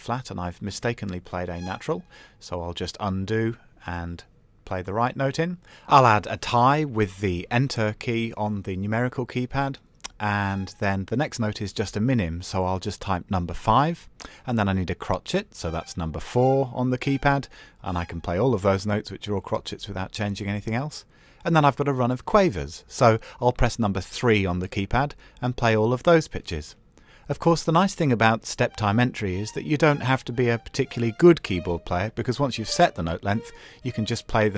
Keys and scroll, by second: 15.4 KP_4, 23.7 KP_3.